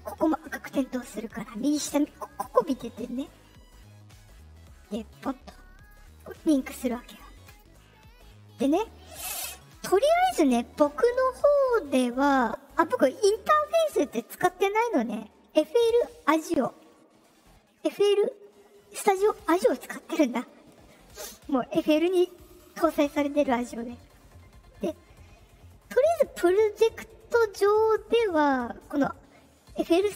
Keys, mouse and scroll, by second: 5.1 click, 5.7 click, 6.1 click, 6.6 click, 7.0 click, 7.4 click, 8.6 click, 11.6 click.